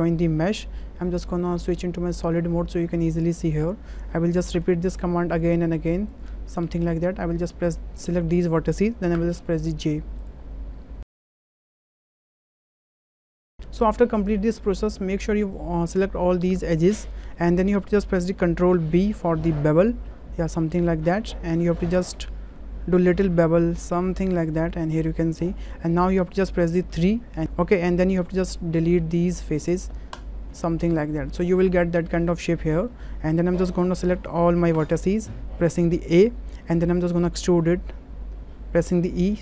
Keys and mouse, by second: 1.7 click, 2.7 click, 4.5 j, 6.6 j, 9.1 j, 11.0 shift+click, 11.2-13.3 typing, 13.6 ctrl+z, 15.6-16.9 drag, 18.9 ctrl+b, 24.3 click, 25.2-25.5 shift+drag, 26.0 shift+drag, 26.9 3, 29.3 Delete, 30.9-32.2 middle drag, 32.9 shift+middle click, 34.7 a, 37.5 3, 39.0 e.